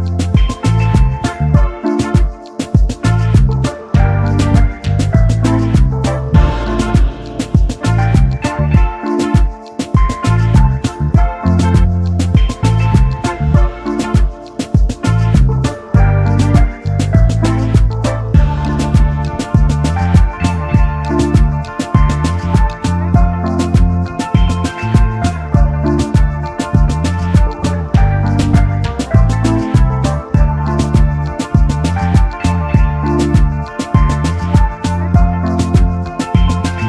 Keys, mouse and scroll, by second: 1.3 \, 4.8 v, 7.5 typing, 8.5 typing, 11.6 double click, 13.8 alt+scroll down 1, 14.2 double click, 16.7 double right click, 19.0 Return, 20.4 shift+click, 24.9 shift+click, 26.4 double click, 27.9 shift+click, 35.0 alt+scroll up 1, 35.2 alt+scroll down 1, 36.1 space.